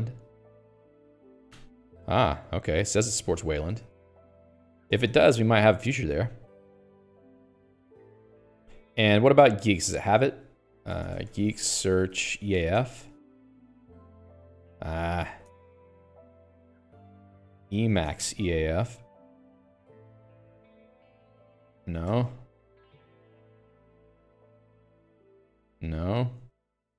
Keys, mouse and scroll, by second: 8.9 Return, 9.6 Escape, 10.6 click, 10.7-13.4 typing, 14.9 Escape, 15.4 a, 15.8 Escape, 17.3-18.8 typing, 17.4 Up, 17.5 Left, 20.2 Escape, 20.6-24.8 ctrl+u.